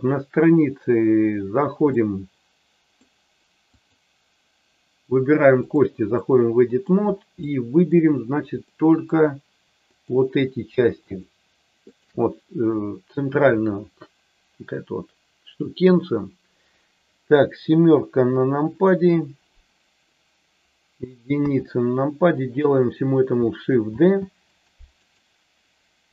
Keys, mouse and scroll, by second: 1.8-3.0 middle drag, 3.7-5.7 drag, 6.1 middle click, 7.5 middle click, 8.7 middle click, 9.8 click, 11.1 shift+click, 11.9 shift+click, 18.0 KP_7, 21.3 KP_1, 23.8 shift+d, 24.5 click, 25.1-26.1 right drag.